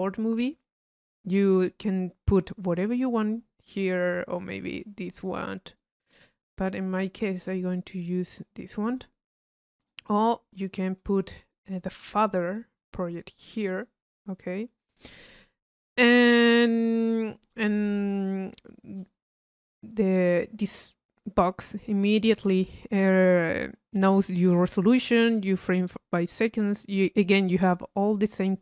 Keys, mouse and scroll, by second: 0.3 click, 1.3 click, 1.7 click, 2.4-3.6 drag, 3.7 click, 4.6 click, 5.8-6.8 drag, 7.1-9.3 drag, 9.8 click, 10.7 middle click, 10.9 u, 11.5 click, 12.1 middle click, 12.3-14.4 drag, 14.5-16.2 middle drag, 16.2-17.5 drag, 17.9 click, 18.7 click, 26.9 click, 28.3-28.6 drag.